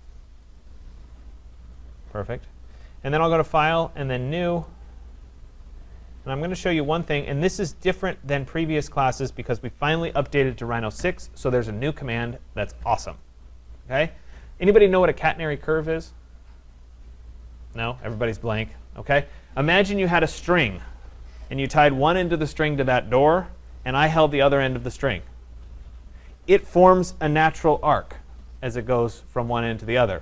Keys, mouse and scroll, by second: 0.6 click, 3.6 click, 4.8 click, 8.4 click, 8.6 click.